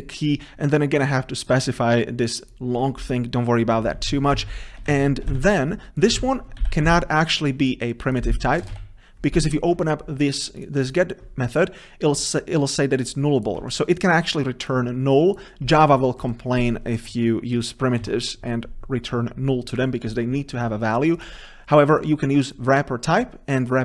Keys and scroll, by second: 4.2 ctrl+z, 7.0 ctrl+z, 8.7 ctrl+z, 10.8 ctrl+b.